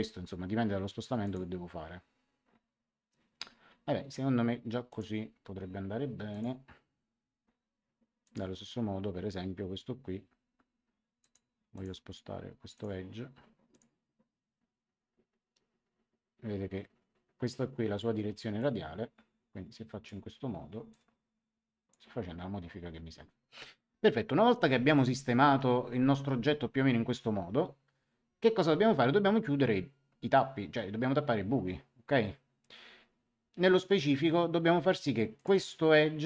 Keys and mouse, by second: 1.2 click, 4.8 click, 6.2 click, 8.2 click, 11.1 click, 18.5 click, 20.8 click, 24.9 click, 35.3 click.